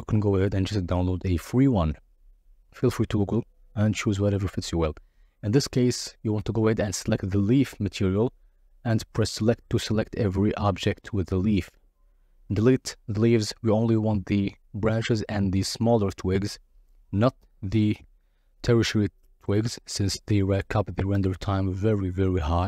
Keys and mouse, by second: 1.1 Tab, 1.8 click, 4.5 click, 5.3-6.9 drag, 7.5-8.2 drag, 8.6 drag, 8.9 click, 9.6 x, 11.0 Tab, 14.9 KP_Divide, 16.5 KP_Divide, 18.6 click, 19.4 click.